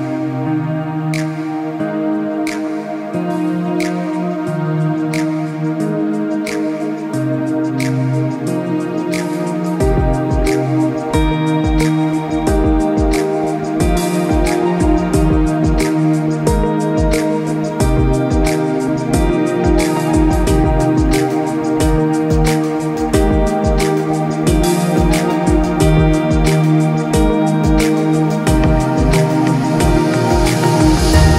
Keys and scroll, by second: 30.8 ctrl+=.